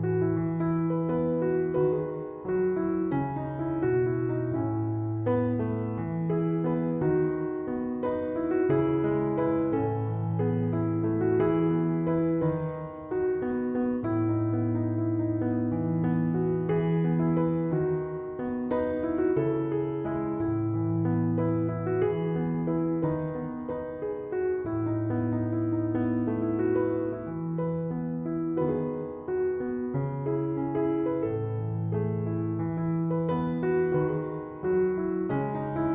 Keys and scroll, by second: 21.2 2, 21.5 Return.